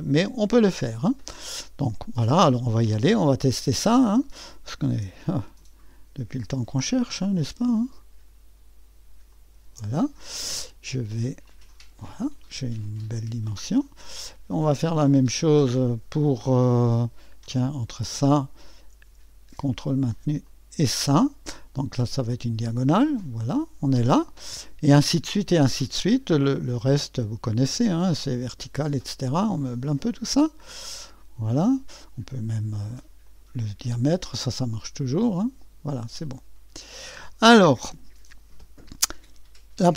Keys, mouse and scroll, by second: 0.0 click, 4.0 click, 9.3 ctrl+click, 11.4 click, 13.0-13.9 drag, 17.9 click, 20.5 click, 22.3 click, 26.7 click, 28.2 click, 30.1-31.8 drag, 33.2 click, 34.7 click, 36.3 click.